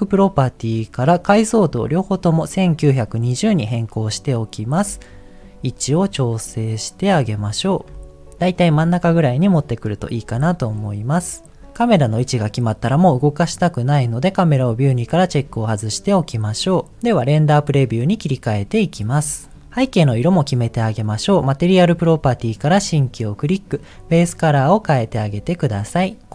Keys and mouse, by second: 0.1 click, 1.7-3.5 drag, 5.0-7.2 middle drag, 8.0 middle click, 10.5-11.5 middle drag, 15.2 click, 22.7 click, 23.9 click.